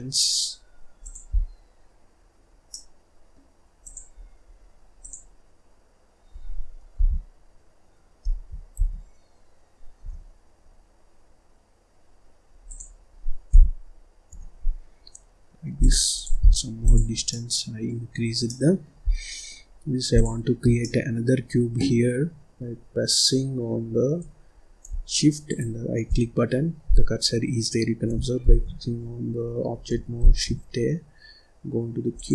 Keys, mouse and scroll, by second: 1.3-1.9 scroll down 1, 1.9-2.6 scroll down 1, 2.6-3.7 middle drag, 3.7 click, 4.1-4.4 scroll down 1, 4.4-4.9 scroll up 2, 4.9 click, 6.9 g, 8.7 s, 13.4 g, 16.1 click, 16.3-16.7 scroll down 2, 16.7 click, 17.1 scroll up 1, 17.2 middle click, 18.0-18.3 scroll up 1, 18.3 middle click, 19.0 scroll down 2, 19.2 middle click, 19.6-20.0 scroll up 2, 20.0 click, 20.7-23.2 middle drag, 23.2-25.6 scroll up 1, 25.6 shift+right click, 26.4-26.8 scroll up 2, 26.8-27.1 scroll down 2, 27.1-28.3 scroll up 1, 28.3 shift+a, 30.1 shift+a.